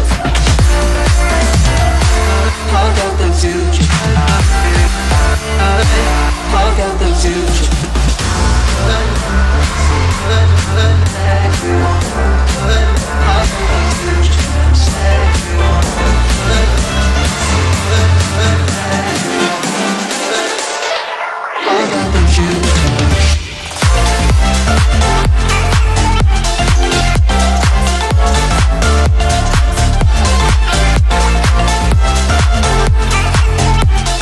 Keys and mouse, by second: 0.1 click, 2.0 ctrl+-, 2.6 space, 4.2 click, 4.4-4.7 space, 7.5 space, 7.7 click, 7.7 space, 8.7-9.1 click, 8.9 space, 9.3 click, 9.5 space, 9.9 click, 15.4-23.5 drag, 26.1 ctrl+click, 29.2 click, 30.2 ctrl+click, 32.0 ctrl+click.